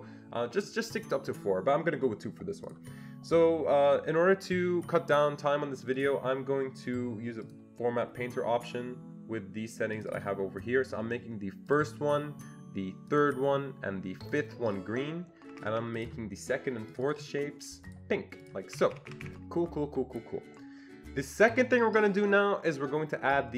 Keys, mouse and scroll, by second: 2.6 click, 6.0 click, 7.4-10.0 click, 10.1 double click, 11.7 click, 13.1 click, 14.3 click, 15.5 Escape, 15.7 Escape, 16.0 click, 16.9 click, 17.0 double click, 17.9 click, 18.4 click, 18.8 Escape, 18.9 Escape, 19.1 Escape, 19.2 Escape.